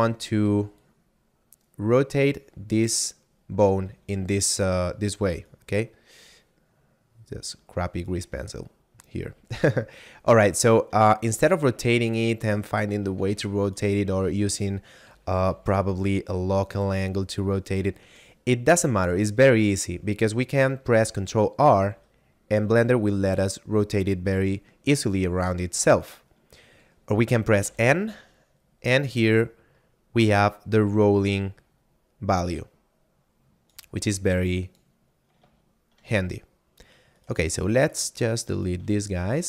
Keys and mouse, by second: 0.5 d, 0.8 click, 3.6 d, 5.4 right click, 8.1 d, 9.0 shift+middle click, 11.3 r, 12.0 right click, 12.5 shift+middle click, 13.2 r, 13.7 right click, 14.1 shift+middle click, 15.1 r, 15.5 y, 16.9 right click, 17.5 shift+middle click, 18.9 shift+middle click, 21.7 ctrl+r, 25.9 right click, 27.5 n, 28.8 middle click, 31.3 click, 34.2 click, 35.7 shift+middle click, 36.6 middle click, 37.1 right click, 37.5 shift+right click, 37.8 shift+right click, 38.1 shift+right click, 38.5 shift+right click, 39.1 x.